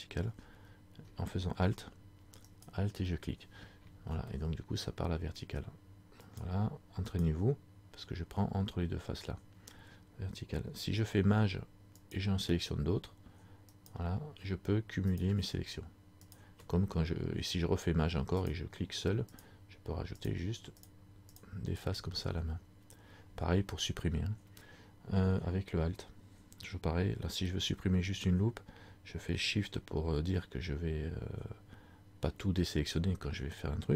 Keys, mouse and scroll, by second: 2.6 alt+right click, 4.5 middle click, 6.4 alt+right click, 12.3 alt+shift+right click, 16.4 alt+shift+right click, 18.6 shift+right click.